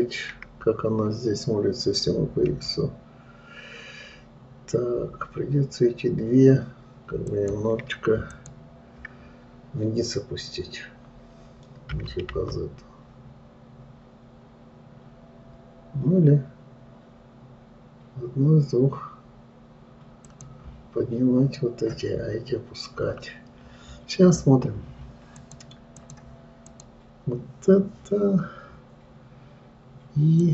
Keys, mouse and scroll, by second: 8.7 shift+click, 22.8-23.5 scroll up 3, 23.5-24.5 scroll down 2, 24.5-25.8 scroll down 1, 25.8-27.2 drag.